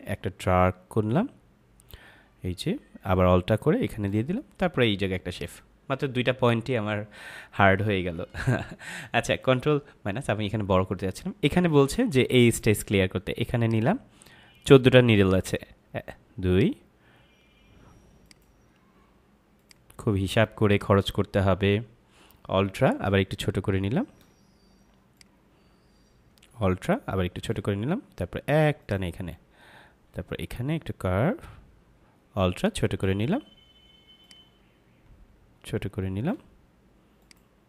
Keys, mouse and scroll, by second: 5.3 click, 8.1 ctrl+Num_Lock, 8.3 ctrl+=, 13.6 click, 25.1 click, 28.7 click, 34.1 click, 37.1 click.